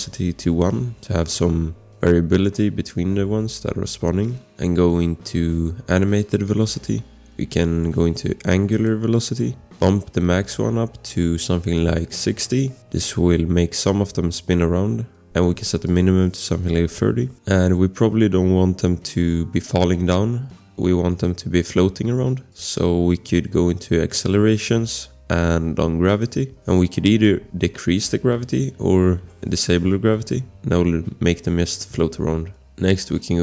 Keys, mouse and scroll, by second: 0.4 1, 11.7-12.6 typing, 15.8 click, 16.6-17.4 typing, 17.2 scroll, 22.5 click, 26.3 scroll, 28.8 0, 29.1 Return, 32.5 scroll.